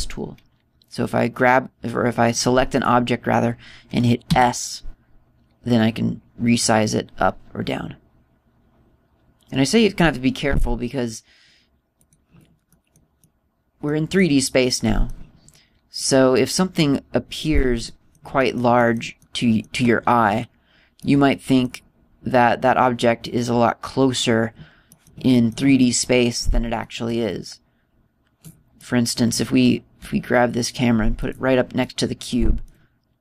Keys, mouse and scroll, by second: 3.1 right click, 3.6 right click, 5.1 s, 13.0 click, 13.6 middle click, 14.1 middle click, 15.1 middle click, 16.9 right click, 18.8 middle click, 19.3 middle click, 19.7 middle click, 20.1 middle click, 20.9-21.9 scroll up 4, 21.9 middle click, 21.9 scroll up 1, 22.9 scroll down 2, 24.6-24.9 scroll up 1, 25.0-25.8 scroll down 4, 25.8 middle click, 26.2 middle click, 26.7 middle click, 27.7 middle click, 29.7 middle click, 30.1-30.9 scroll down 1, 30.9 g, 32.2 click, 32.7 middle click.